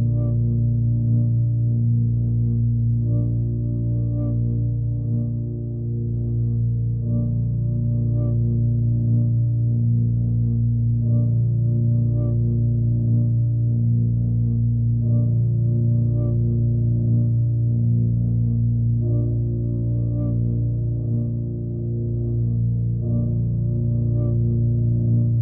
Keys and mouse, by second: 3.5-4.4 alt+middle drag, 6.0-6.9 drag, 7.3 click, 7.7 click, 8.6-11.5 drag, 12.5-13.3 alt+middle drag, 13.8-14.7 alt+middle drag, 14.7 ctrl+z, 15.2 shift+click, 15.4 shift+click, 17.0 ctrl+l, 18.3-18.8 alt+middle drag, 22.6 g, 23.9-24.4 alt+middle drag, 24.7-25.3 drag.